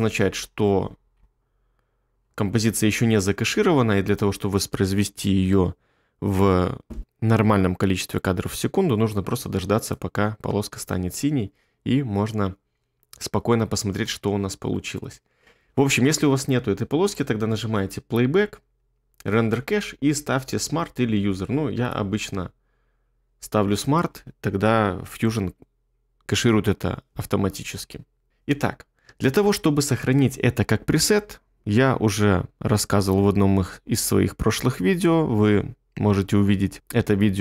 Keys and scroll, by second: 10.7 space, 14.0 space.